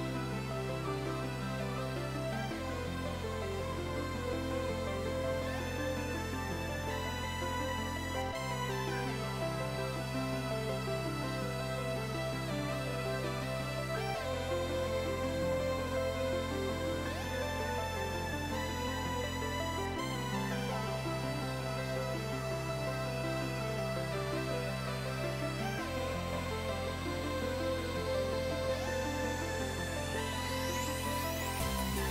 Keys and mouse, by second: 7.7 click, 8.6 ctrl+shift+x, 8.7 click, 12.9 click, 25.5 click.